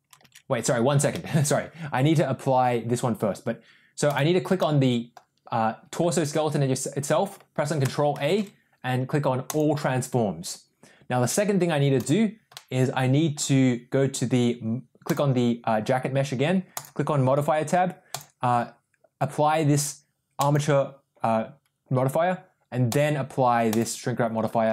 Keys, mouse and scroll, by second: 0.4 ctrl+z, 1.0 middle click, 4.0 click, 4.5-5.0 middle drag, 8.0 ctrl+a, 11.9 click, 12.5-13.3 middle drag, 15.0 click, 16.6 click, 18.0 click, 22.8-23.8 drag, 24.6 middle drag.